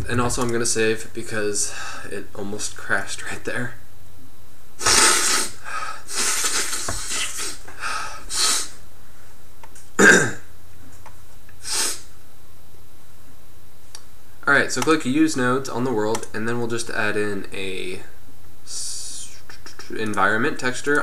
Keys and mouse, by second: 0.1 ctrl+s, 12.9-14.9 middle drag, 14.9-21.0 drag.